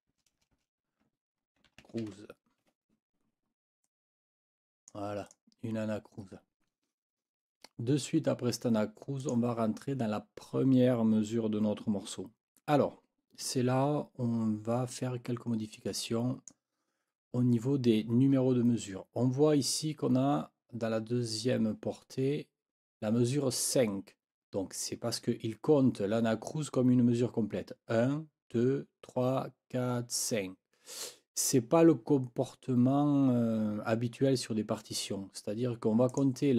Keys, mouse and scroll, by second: 0.0-0.1 typing, 1.4-2.5 typing, 2.7 Escape, 3.8-5.1 drag, 5.3 click, 9.2 click, 15.7 click, 36.1 click.